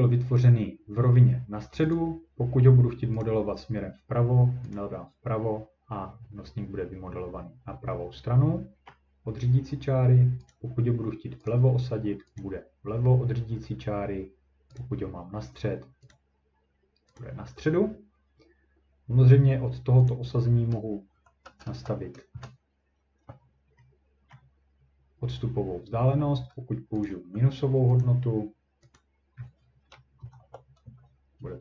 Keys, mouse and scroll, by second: 1.9 click, 3.2 click, 4.7 click, 8.9 middle click, 10.5 click, 11.5 click, 12.4 click, 14.8 click, 16.1 click, 17.2 click, 20.1 click, 20.9-22.3 typing, 24.0-24.8 typing, 24.4-25.1 scroll, 27.1 click, 28.0 click, 29.0 click, 30.2 typing, 30.8 Return.